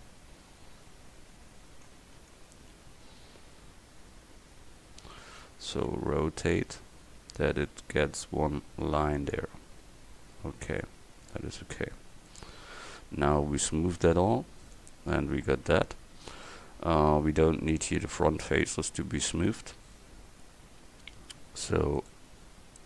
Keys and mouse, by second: 0.7 KP_1, 2.3 KP_3, 3.5 KP_7, 6.0 r, 11.5 Tab, 15.7 Tab, 19.4 click, 20.1-22.0 middle drag, 22.0-22.8 drag.